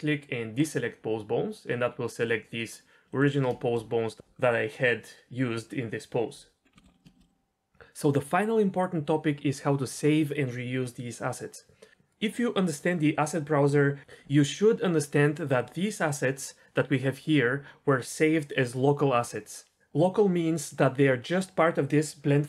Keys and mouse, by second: 2.5-3.2 middle drag, 6.7 shift+middle click, 6.9 middle click, 7.0 shift+middle click, 7.2 middle click, 16.1-22.4 drag.